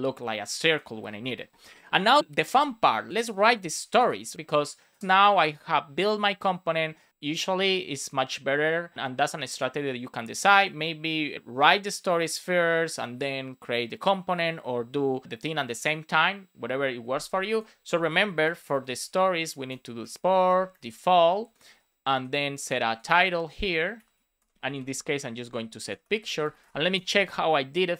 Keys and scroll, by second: 19.6 Return, 19.9 space, 21.3 space, 21.6 shift+[, 22.0 Return, 23.1 Return, 24.2-26.3 typing, 26.9 super+s.